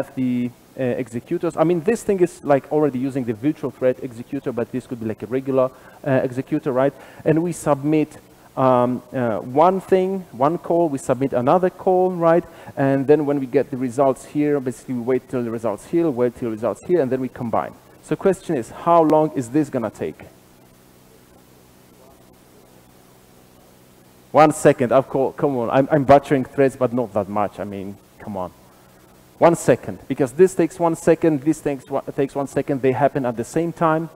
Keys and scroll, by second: 21.7 ctrl+r, 21.7 shift+F10.